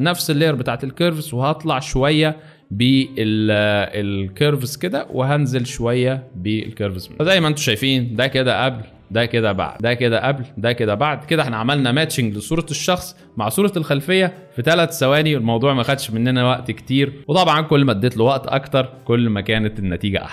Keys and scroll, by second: 9.7 alt+space.